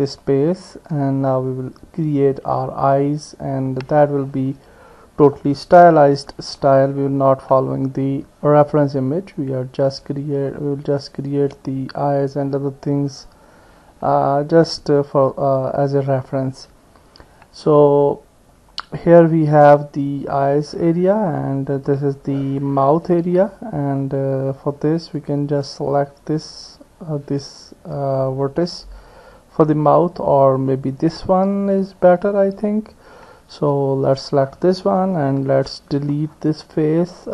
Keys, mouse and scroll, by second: 0.2-1.9 middle drag, 1.9-4.0 drag, 4.0 middle click, 6.0 KP_1, 11.0 click, 25.2 click, 25.6 click, 30.7 click, 35.4 Delete.